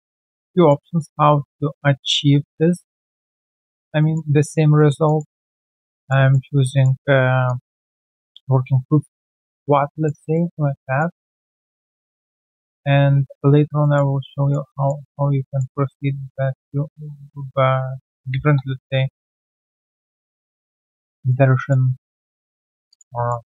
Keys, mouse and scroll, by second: 0.5 alt+middle click, 0.8 alt+click, 1.3 right click, 3.8 Tab, 4.0 alt+middle click, 4.3 alt+click, 4.7 alt+middle click, 5.0 alt+click, 5.4 alt+middle click, 5.9 alt+click, 6.3 alt+middle click, 6.6 alt+click, 7.3 alt+click, 7.4 alt+click, 8.3 alt+right click, 8.8 alt+right click, 9.0 alt+right click, 9.9 alt+click, 10.3 alt+middle click, 10.8 alt+right click, 11.3 alt+click, 11.6 alt+right click, 11.8 alt+click, 12.1 alt+middle click, 12.6 shift+right click, 13.4 alt+right click, 13.8 alt+middle click, 14.3 alt+click, 14.6 alt+middle click, 15.0 alt+click, 18.4 typing, 18.5 Return, 19.5 alt+click, 19.8 alt+middle click, 20.2 alt+click, 20.8 alt+middle click, 21.1 alt+click, 22.0 right click, 22.8 q, 22.8 alt+click, 23.1 alt+middle click, 23.4 alt+right click.